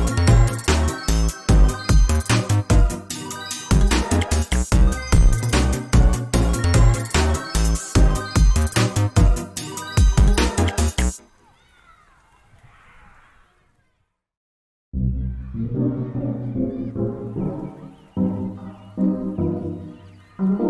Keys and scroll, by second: 3.0 ctrl+space, 9.1 ctrl+z, 14.8 ctrl+z.